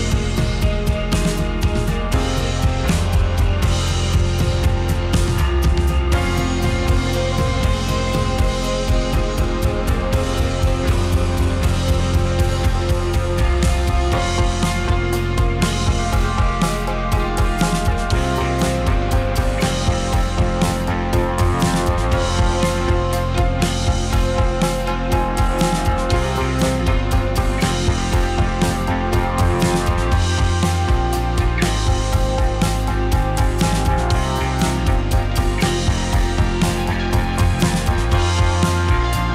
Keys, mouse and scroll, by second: 0.2 scroll down 1, 0.3-2.3 middle drag, 4.1 `, 4.8 click, 6.8 alt+d, 10.5 shift+r, 10.8 shift+r, 10.9 shift+r, 11.2 shift+r, 12.3-13.2 middle drag, 14.1-14.6 middle drag, 14.6 r, 16.1 s, 16.8 click, 16.9-18.5 middle drag, 18.9 click, 19.0 middle drag, 19.3 s, 19.9 click, 20.0-21.0 middle drag, 21.2 middle drag, 21.5 drag, 21.8 middle click, 22.2 r, 23.7 drag, 23.8-26.2 middle drag, 26.2 click, 27.0 `, 28.1 r, 29.0 s, 29.6 click, 30.7 click, 30.9-31.9 middle drag, 31.9 scroll up 2, 32.1-34.0 middle drag, 34.0 scroll down 1, 34.2-36.7 middle drag, 36.7 drag, 36.9-37.4 middle drag, 37.4 r, 37.8 click, 38.0-38.9 middle drag, 39.0 click, 39.2 r.